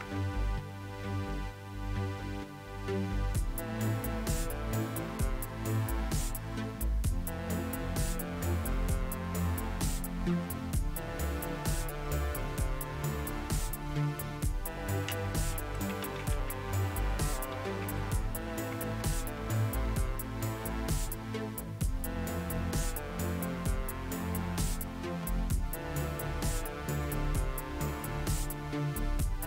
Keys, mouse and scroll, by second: 0.0 Return, 15.3-19.0 typing.